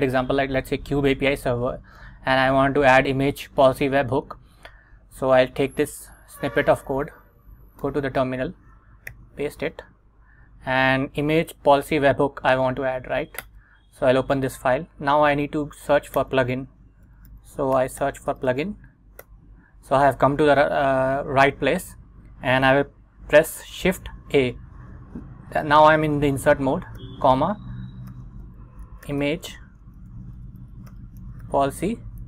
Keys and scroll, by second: 7.0 super+Tab, 7.9 Return, 9.2 super+v, 10.0 Up, 13.5 Return, 16.3-19.1 typing, 19.3 Return, 24.3 shift+a, 27.1-32.2 typing.